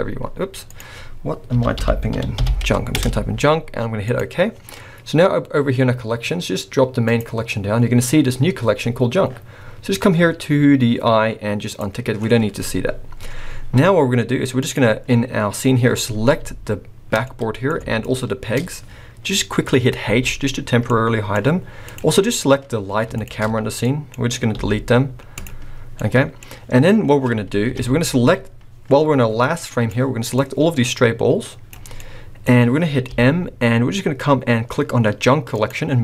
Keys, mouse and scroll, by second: 7.1 click, 11.7 click, 14.6 click, 15.8-16.4 scroll up 1, 17.2 middle click, 18.1 shift+click, 20.0 h, 20.9 middle click, 20.9 scroll up 1, 21.8 click, 22.2-23.1 scroll down 2, 23.1 shift+click, 23.8 middle click, 24.5 x, 25.9 middle click, 26.4 scroll up 1, 27.7 KP_1, 29.4 click, 30.3 click, 31.9 middle click, 32.6-33.0 scroll up 1, 33.0 m.